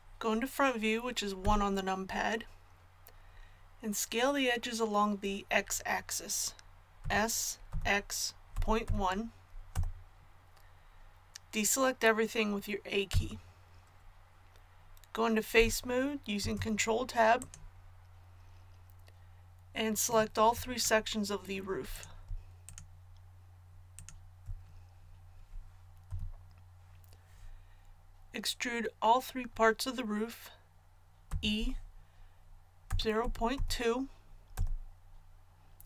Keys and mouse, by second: 1.4 KP_1, 7.0 s, 13.1 a, 16.4 ctrl+Tab, 26.0 KP_1, 31.3 e.